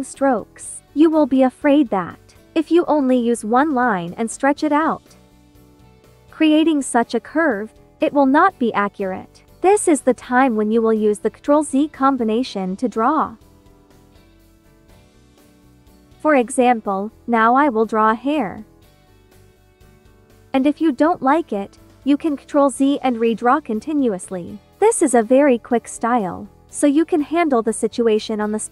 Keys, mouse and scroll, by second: 0.0 click, 0.0 click, 12.7-15.7 drag, 18.6 click, 21.9 ctrl+z, 22.6 click, 23.7 ctrl+z, 24.3 click, 26.2 ctrl+z, 26.8 click, 27.7 ctrl+z, 28.1 click.